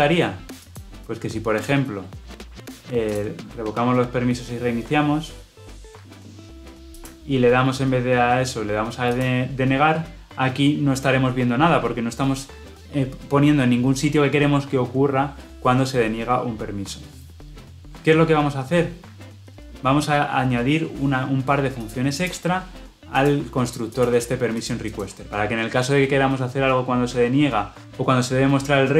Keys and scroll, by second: 5.7 shift+F10.